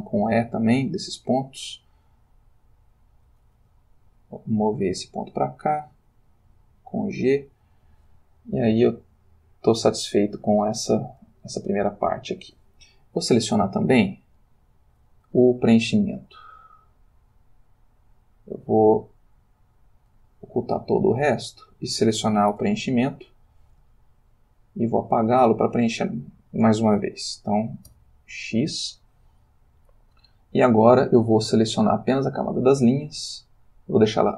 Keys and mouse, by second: 0.9 click, 1.8 click, 3.6 g, 5.0 click, 5.9 click, 6.5 g, 7.6 click, 8.5-10.7 ctrl+middle drag, 11.5-12.7 shift+middle drag, 13.3 click, 14.5 click, 19.0-20.3 drag, 21.3 click, 22.6 l, 23.1 i, 23.9-25.5 ctrl+middle drag, 25.7 ctrl+shift+middle click, 27.9 x, 28.5 click, 32.2 click.